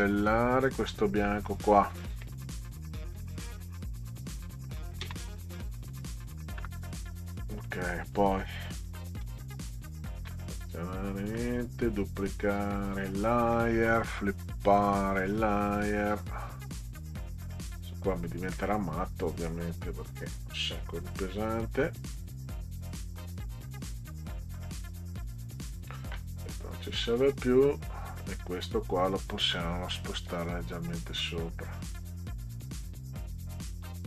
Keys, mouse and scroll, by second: 0.1 click, 1.5 click, 3.4 Delete, 5.0 space, 9.2 ctrl+a, 10.7 right click, 12.9 click, 14.7 click, 15.2 click, 20.1 click, 25.3 click, 26.9 click, 28.5 click, 30.3 click, 31.0-32.2 drag, 33.4-34.0 drag.